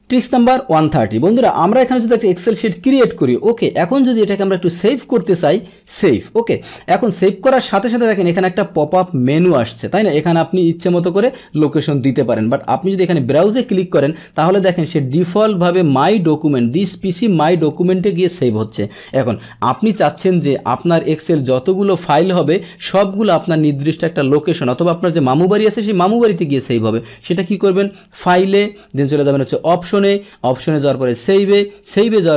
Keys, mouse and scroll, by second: 2.5 ctrl+n, 4.7 click, 6.0 click, 12.9 click, 20.0 click, 20.7 Escape, 21.8 click, 23.5 click, 27.3 click, 28.9 click, 31.0 click.